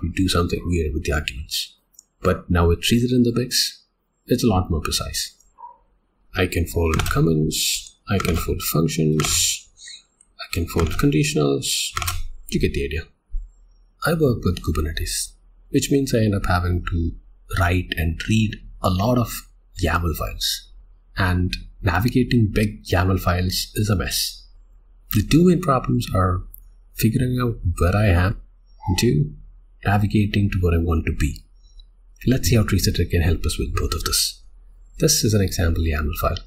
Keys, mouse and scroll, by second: 5.5 Tab, 7.0 Tab, 7.4 j, 7.7 j, 8.3 Tab, 9.3 Tab, 9.6 j, 9.7 j, 9.9 j, 10.1 j, 10.9 Tab, 12.1 Tab, 13.4 click, 34.4 Return.